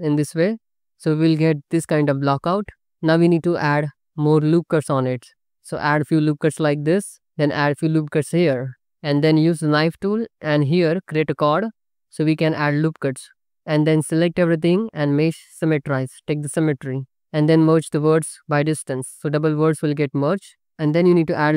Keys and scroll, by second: 5.4 Tab, 5.8 ctrl+r, 7.9 ctrl+r, 9.5 1, 11.4-13.7 typing, 16.5 a, 17.7 m, 20.2 ctrl+r.